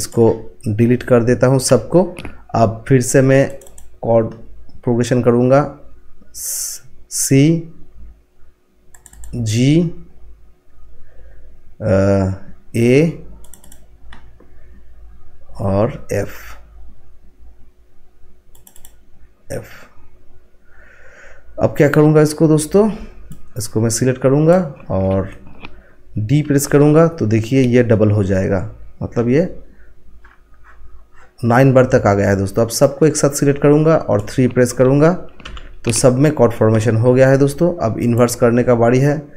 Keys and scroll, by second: 1.6 Delete, 26.4 d, 35.4 3.